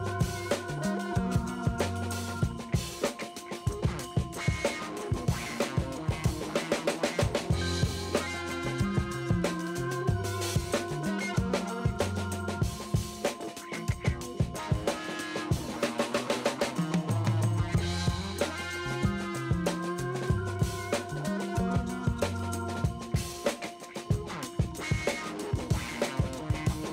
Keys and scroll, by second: 0.0-2.3 typing, 1.0 ctrl+alt+z, 3.9 4, 6.2 space, 6.8 space, 8.2 [, 12.4 space, 12.7 ], 14.5-17.5 typing, 18.7 space, 19.0 space, 20.6 v, 21.0 s, 23.5 ctrl+alt+z, 25.2-26.9 typing.